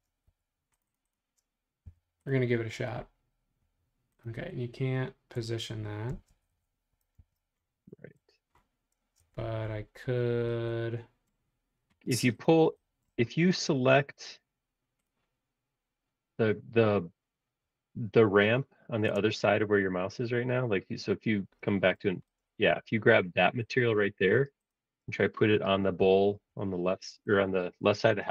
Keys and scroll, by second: 0.3 Escape, 1.8 b, 6.1 space, 7.2 super+z, 8.1 Escape, 9.0 space, 9.3 Escape, 9.9 space, 12.1 space, 19.2 space, 19.4 o, 26.0 b, 27.7 space, 27.8 Escape.